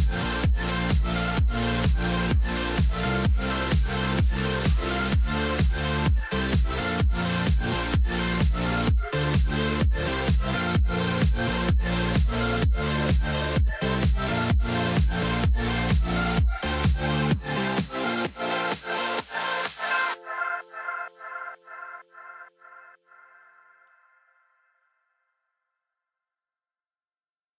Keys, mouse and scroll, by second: 4.7 right click.